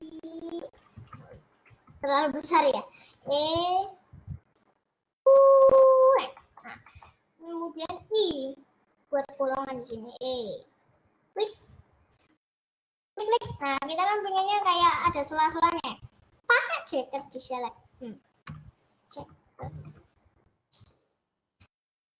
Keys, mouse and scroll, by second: 1.2 ctrl+z, 2.0 s, 3.2 e, 6.5-7.9 shift+middle drag, 7.9 i, 9.9 e, 12.5-13.2 scroll up 1, 13.2 click, 14.0 middle click, 14.4-14.7 scroll down 1, 14.7-21.8 middle drag.